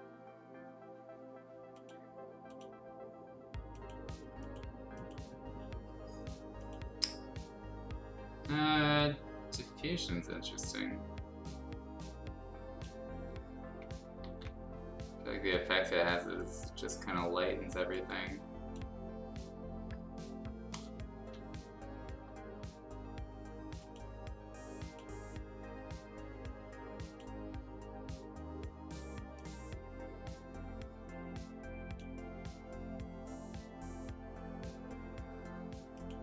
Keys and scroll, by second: 14.2 ctrl+z, 21.2 ctrl+z.